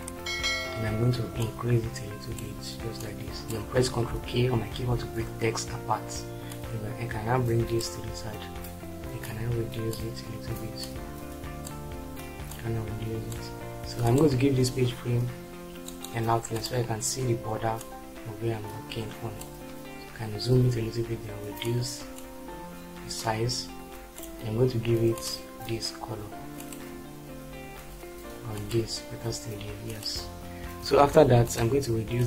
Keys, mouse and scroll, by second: 5.0 ctrl+k, 30.7 shift+F4.